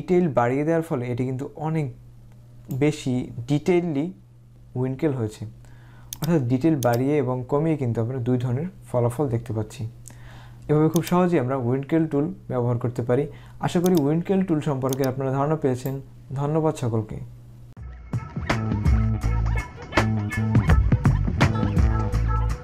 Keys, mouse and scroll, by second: 6.4 click, 10.5 click, 11.1 right click, 13.9 click.